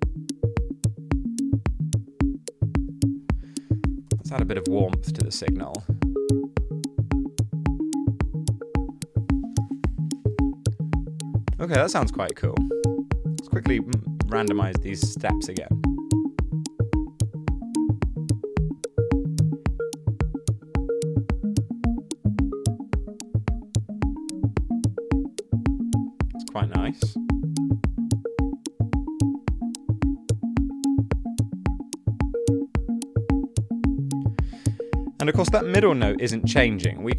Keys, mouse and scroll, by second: 3.9-4.8 typing.